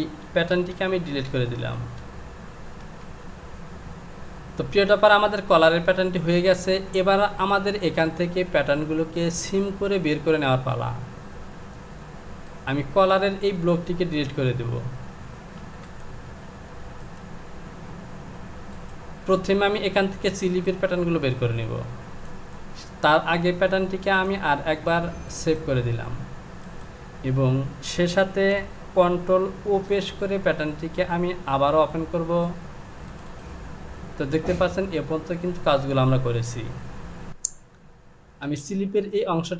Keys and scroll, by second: 15.6 Delete, 38.4 Return.